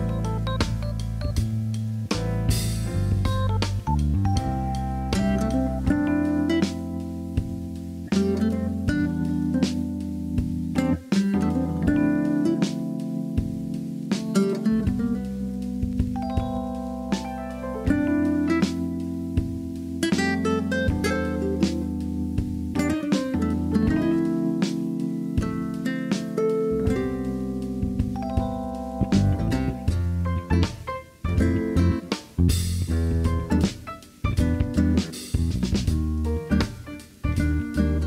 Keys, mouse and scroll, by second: 0.2-1.9 middle drag, 2.5 KP_3, 3.3 Tab, 3.6 shift+middle click, 4.0 alt+z, 5.5 shift+middle click, 5.9 click, 6.8 g, 7.8 click, 7.9 g, 8.7 click, 8.9 g, 9.8 click, 10.2 shift+middle click, 12.2 alt+z, 13.5 click, 14.4 g, 14.9 click, 15.2 g, 16.0 click, 16.3 g, 17.0 click, 17.2 g, 18.6 g, 19.2 click, 19.4 g, 20.6 alt+z, 20.9 alt+z, 21.1-23.3 middle drag, 23.8 Tab, 24.4-24.8 middle drag, 25.3 middle click, 26.4-27.5 middle drag, 28.0 Tab, 30.1 click, 30.6-31.6 shift+drag, 32.1 KP_7, 32.8 shift+middle click, 34.5 r, 35.5 click, 36.1 s, 36.5 click, 37.2 g, 37.8 click.